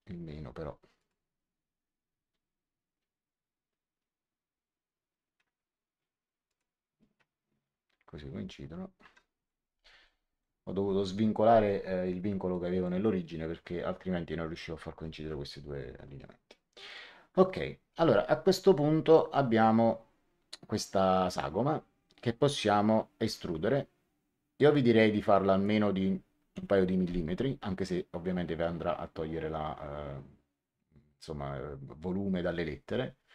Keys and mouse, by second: 0.9 click, 6.4 click, 8.9 Escape, 10.0 middle click, 12.5 middle click, 16.8 click, 21.2 click, 23.1 e, 24.6 click, 26.5 KP_2.